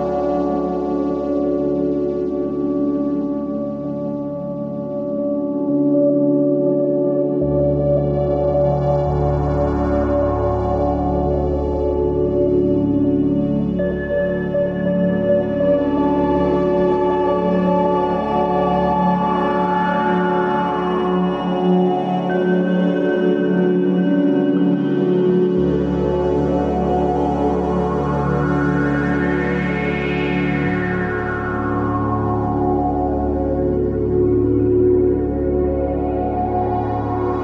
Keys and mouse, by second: 0.5 Tab, 0.8 alt+z, 1.6 Tab, 5.1 ctrl+s, 5.6 Tab, 8.4 3, 9.7 click, 10.6 alt+z, 12.0 alt+shift+click, 14.2 alt+shift+click, 16.7 ctrl+b, 18.7 Tab, 21.3 ctrl+b, 28.0 Tab, 28.7 alt+z, 29.6 click, 30.2-31.7 right drag, 31.7 click, 32.1 right click, 33.3 click, 33.9 right click, 35.2 middle click.